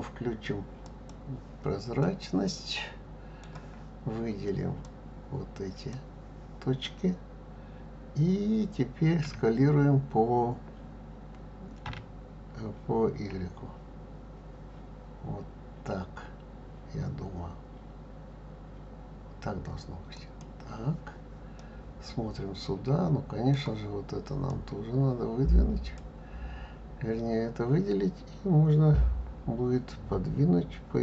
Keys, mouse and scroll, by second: 0.8 click, 2.0-4.8 middle drag, 4.8 click, 9.2 s, 21.5-24.4 middle drag, 24.4 click.